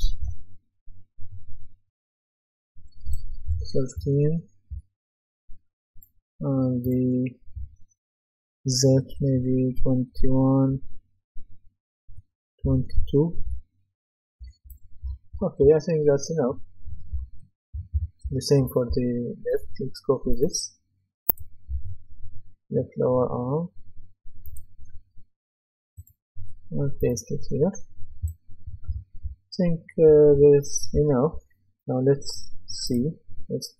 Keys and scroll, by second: 0.2 Return, 3.5-4.7 typing, 9.7 KP_2, 10.7 Return, 12.6 KP_2, 13.4 Return, 14.8-19.4 typing, 28.4-31.3 typing.